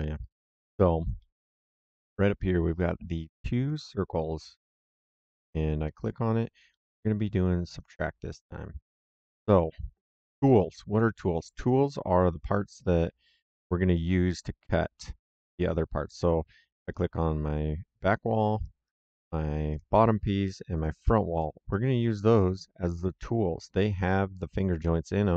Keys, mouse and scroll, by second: 1.1 middle click, 4.6 click, 7.7 click, 8.8 middle click, 16.8 click, 18.5 right click, 19.6 click, 20.7 click, 21.3 middle click, 21.6 right click.